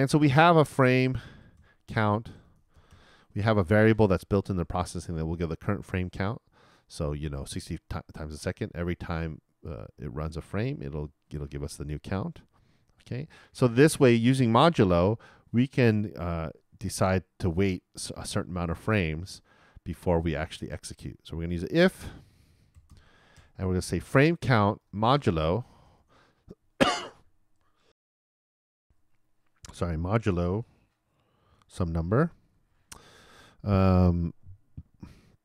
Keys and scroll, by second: 1.9-2.9 typing, 22.9-23.8 typing, 26.0 shift+4, 28.8 alt+BackSpace, 31.5 shift+5.